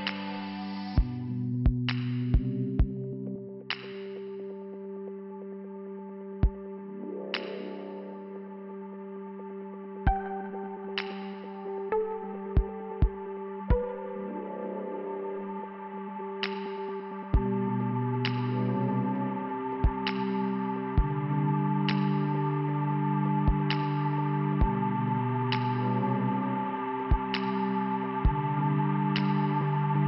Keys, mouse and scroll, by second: 0.7 f, 3.1 scroll up 1, 4.0 middle click, 7.7 middle click, 8.4 scroll down 1, 9.2 scroll down 1, 9.2 scroll up 1, 9.9 middle click, 12.7 click, 12.8 click, 14.7 click, 21.6 click, 21.7 click, 22.9 scroll up 1, 23.4 scroll down 1, 25.4 click, 25.5 click, 25.9 click, 26.0 click, 29.9 click.